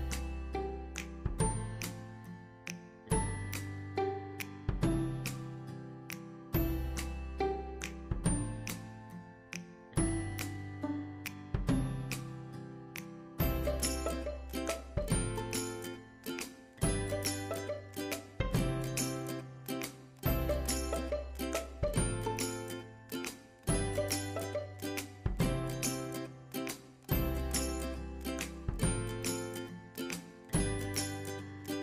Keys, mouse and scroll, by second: 1.6 scroll up 1, 2.9-8.8 drag, 8.8 space, 10.3 ctrl+click, 12.7 scroll down 1, 17.9 click, 26.4 ctrl+a, 27.4 typing, 28.7-29.3 typing.